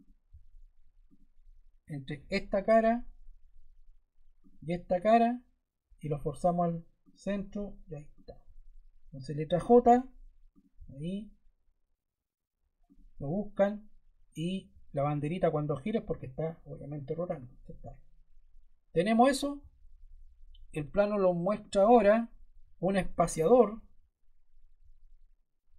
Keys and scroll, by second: 9.5 j.